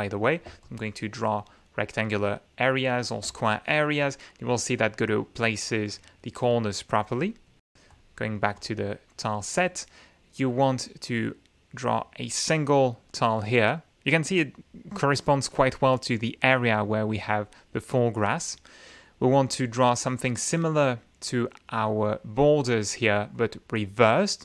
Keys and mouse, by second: 0.6-1.6 ctrl+shift+drag, 2.0-3.2 ctrl+shift+drag, 3.6 ctrl+shift+click, 7.2 click, 7.9 click, 8.5 click, 12.0 click, 18.1-19.2 drag, 23.3-24.4 drag.